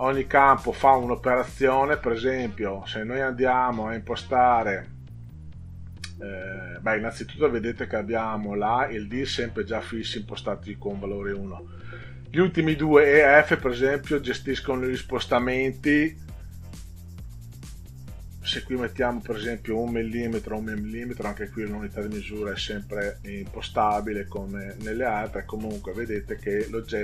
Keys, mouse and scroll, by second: 14.3 click, 17.3 1, 19.0 click, 20.3 1, 23.7 click, 24.2 click, 25.1 click, 26.5 click.